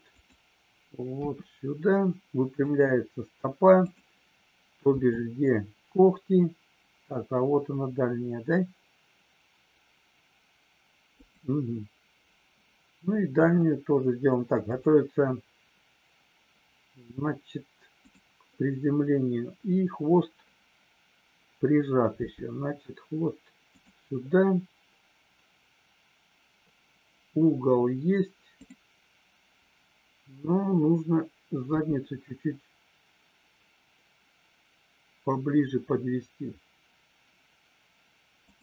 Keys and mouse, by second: 1.2 r, 2.6 click, 3.8 click, 4.9 g, 11.1 click, 13.2 r, 14.6 click, 18.0 click, 22.2 g, 28.5 click.